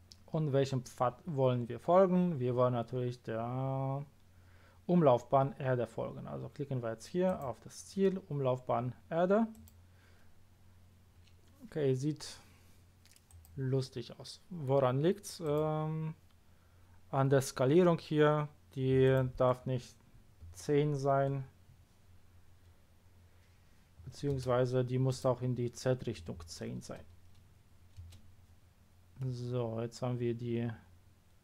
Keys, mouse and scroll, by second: 7.2 click, 9.5 click, 13.2 click, 15.4 click, 19.0 click, 20.4 KP_1, 24.0 KP_0, 24.4 Return, 25.1 click, 26.2 KP_1, 28.0 Return, 29.2-30.0 middle drag.